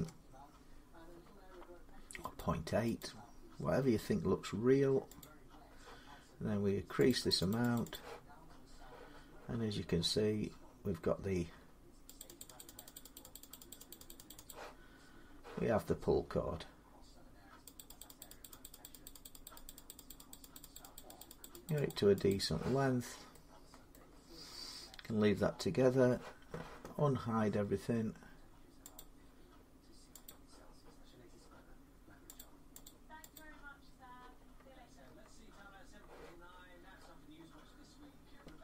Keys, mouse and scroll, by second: 0.1 Return, 2.2 click, 2.8 click, 5.0 click, 6.9 click, 7.1 click, 7.3 click, 7.5 click, 7.7 click, 8.1-9.1 scroll, 10.7 middle click, 12.0 click, 12.2 click, 12.4 click, 12.5 click, 12.7 click, 12.9 click, 13.1 click, 13.3 click, 13.5 click, 13.7 click, 13.9 click, 14.1 click, 14.3 click, 14.7 scroll, 17.5 click, 17.8 click, 18.0 click, 18.2 click, 18.4 click, 18.6 click, 18.8 click, 19.0 click, 19.0 middle click, 19.2 click, 19.4 click, 19.7 click, 19.9 click, 20.1 click, 20.3 click, 20.5 click, 20.7 click, 21.0 click, 21.2 click, 21.7 click, 22.1 click, 22.7 scroll up 4, 23.7 middle click, 24.2-26.1 scroll up 3, 26.7-27.1 scroll down 4, 28.7 click, 30.0 click, 30.8 scroll down 2, 32.1 click, 33.1 click, 34.2-34.8 scroll down 1, 34.8 scroll down 1, 35.5-35.9 scroll up 4, 36.3-37.3 scroll up 18.